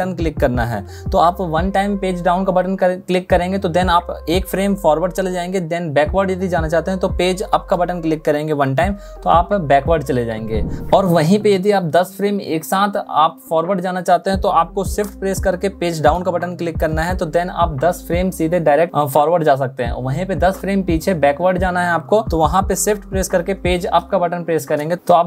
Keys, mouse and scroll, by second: 7.2 Page_Up, 15.0 shift+Page_Down, 22.6 shift+Page_Up.